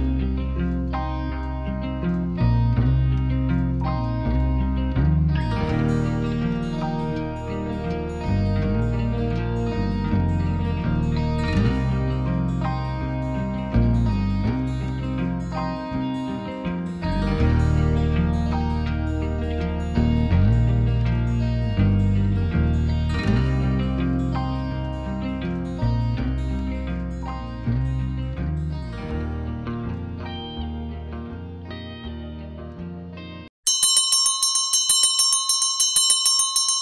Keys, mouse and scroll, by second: 2.5 Tab, 5.1 click, 9.3 shift+click, 13.0 Tab, 17.6 shift+click, 19.8 ctrl+p, 27.7 click, 29.7 r.